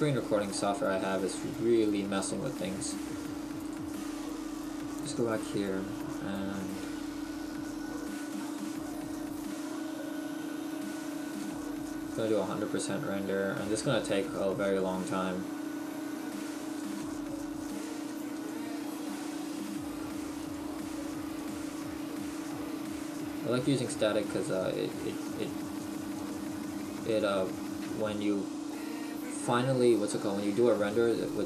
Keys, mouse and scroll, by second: 0.5 middle click, 11.5 click.